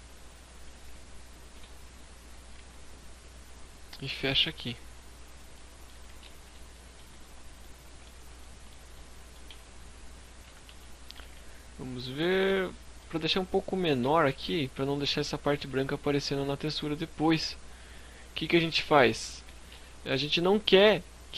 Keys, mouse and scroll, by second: 0.4 shift+click, 0.8 e, 1.2 right click, 1.5 s, 4.4 click, 4.6 middle click, 4.8 z, 5.5 KP_5, 6.0 Tab, 6.2-6.5 scroll down 5, 6.4 scroll up 1, 6.6 middle click, 7.3 shift+middle click, 7.9 middle click, 8.4 Tab, 9.7 KP_3, 10.1 KP_5, 10.4 z, 10.9-11.8 scroll up 4, 11.1 shift+middle click, 13.1 a, 13.6 a, 16.9 middle click, 16.9-17.7 scroll up 1, 18.2 z, 20.0 middle click, 20.6 s.